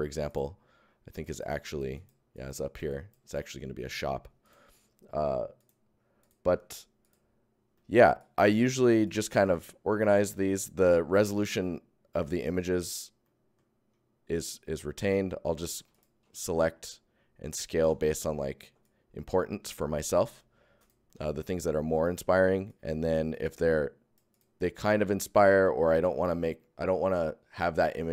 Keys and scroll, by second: 1.0 alt+Tab, 1.2 alt+Tab, 3.0 alt+shift+Tab, 4.4 Tab, 7.3 Tab, 8.1 Tab, 15.0 ctrl+alt+Tab, 15.8 alt+Tab, 18.0 Tab, 18.6 ctrl+Tab, 20.3 alt+Tab.